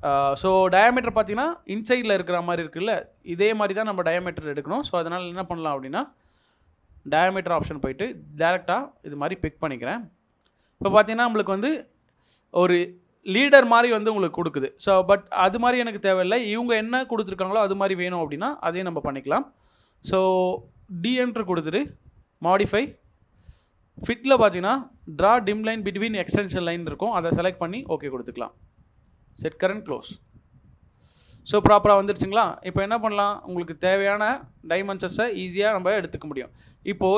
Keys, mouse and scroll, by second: 8.7 double click, 19.2 middle click, 21.0 d, 21.3 space, 30.9 middle click, 32.5-32.9 scroll up 1, 34.9 middle click, 36.4 Escape, 36.6-36.9 scroll, 36.9-37.1 scroll down 1.